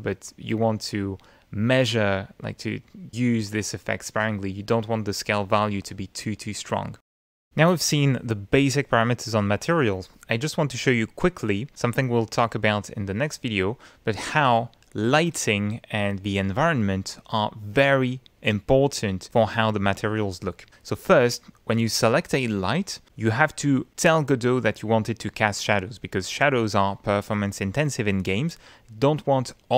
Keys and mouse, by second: 0.9 middle click, 1.8 middle click, 2.6 middle click, 4.5 middle click, 5.6 middle click, 7.0 middle click, 7.1 F10, 9.1 middle click, 24.5 click.